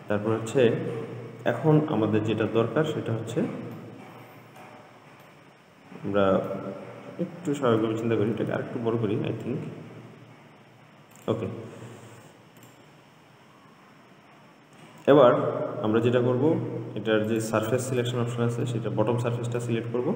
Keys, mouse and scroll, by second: 4.0-7.3 middle drag, 7.3-8.6 scroll down 2, 8.6 s, 13.1 click, 15.6-17.6 middle drag, 17.6 click, 18.3 click, 19.0-20.1 middle drag.